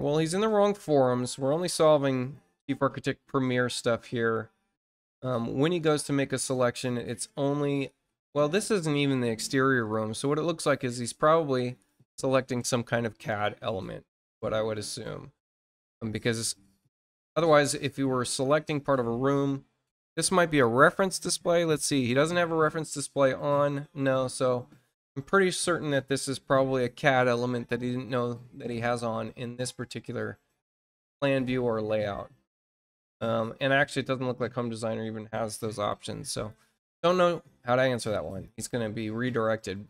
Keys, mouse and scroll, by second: 31.3-36.4 drag, 38.2 click.